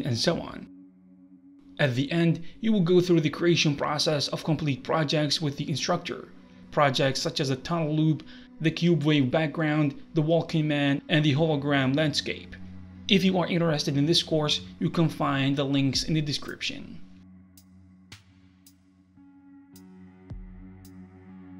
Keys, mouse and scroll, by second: 0.6 middle click, 0.9 alt+middle click, 1.3 alt+middle click, 1.6 shift+Left, 1.6 space, 2.2 alt+middle click, 2.4 scroll down 5, 2.6 alt+middle click, 2.8 middle click, 3.0 alt+middle click, 3.0 scroll down 1, 3.4 middle click, 3.6 scroll up 2, 3.6 middle click, 7.1 click, 8.0 click, 13.8 ctrl+p, 13.8 space.